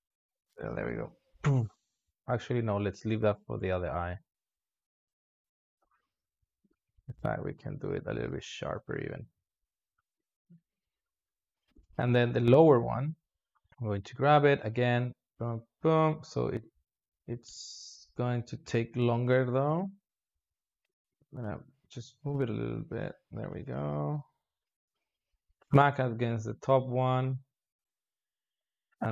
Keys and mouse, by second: 0.5-2.4 drag, 2.4 s, 4.0 drag, 4.2 space, 6.6 space, 6.9 s, 8.4-9.2 drag, 9.2 s, 10.0 click, 10.1 space, 11.6 space, 11.8 alt+shift+z, 12.4 click, 13.4-18.0 drag, 19.3 ctrl+z, 20.8 g, 22.1 g, 23.6-25.8 drag, 26.3-29.1 drag.